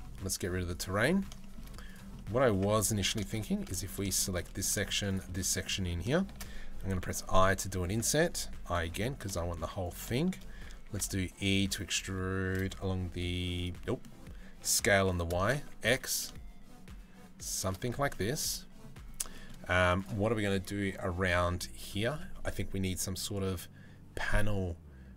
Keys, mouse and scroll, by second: 0.3 click, 0.7 middle click, 1.0 shift+middle click, 2.1 Tab, 2.4 3, 2.6 middle click, 3.3 middle click, 3.7 shift+middle click, 5.1 middle click, 5.7 shift+middle click, 9.7 shift+middle click, 10.4 e, 13.4 middle click, 14.1 s, 17.6 Tab, 17.7 middle click, 18.9 middle click, 20.2 middle click.